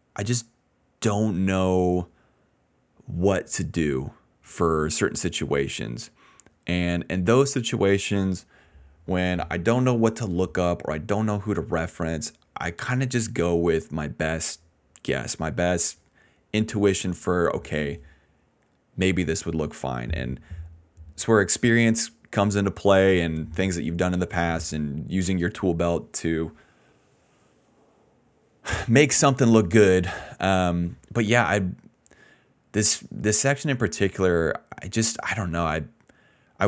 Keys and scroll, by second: 22.3 BackSpace.